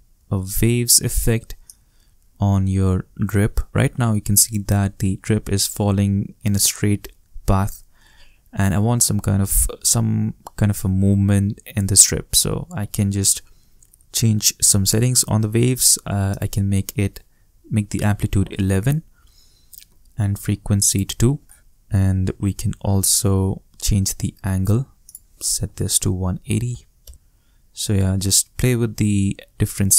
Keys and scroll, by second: 0.0-1.3 typing, 18.0 shift+i, 19.1 shift+Return, 21.4 shift+2, 25.5 shift+i, 26.4 shift+8, 26.7 shift+0, 27.0 shift+Return.